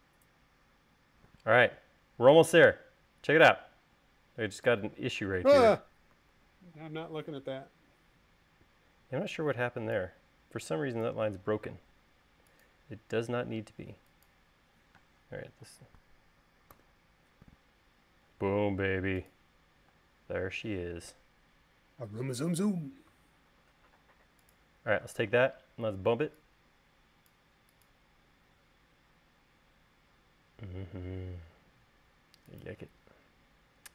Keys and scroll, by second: 6.8 super+z, 9.6 e, 12.2 l, 15.6 space, 17.3 u, 20.5 space.